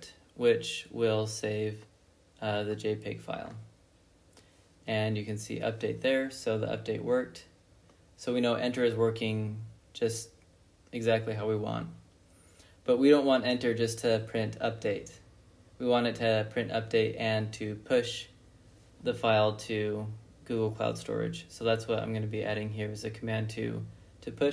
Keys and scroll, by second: 0.4 ctrl+b, 0.6 n, 9.5 ctrl+c, 11.6 Up, 12.0 Left, 13.0 u, 16.5-20.9 typing, 22.2-24.5 typing.